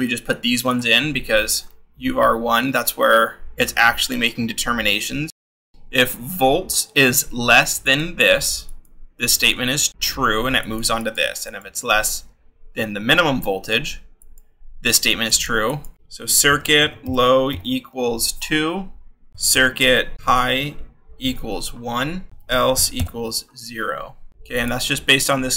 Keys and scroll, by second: 5.7 shift+v, 15.7-23.2 typing, 24.3 shift+-.